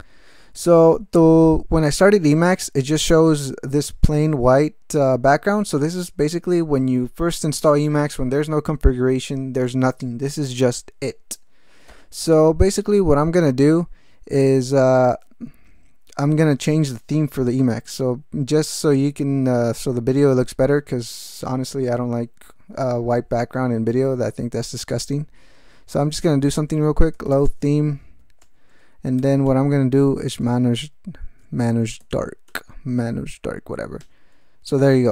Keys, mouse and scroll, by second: 24.3 alt+x, 25.7-27.8 typing, 28.4 Return, 28.9-29.8 typing, 30.4 alt+BackSpace, 31.8-32.7 typing, 34.0 Return.